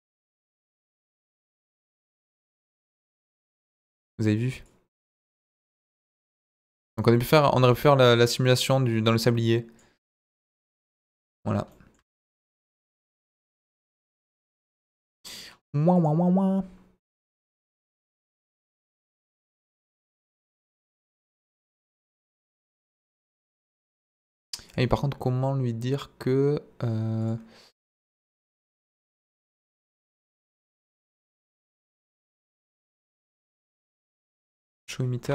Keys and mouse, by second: 0.8-2.2 drag, 2.9 drag, 3.4 middle click, 4.7-9.8 drag, 10.2-11.2 middle drag, 14.2 click, 15.9 click, 18.2-20.8 drag, 22.0-22.9 drag, 23.5-24.1 drag, 24.6-25.3 drag, 27.2 click, 32.8 click.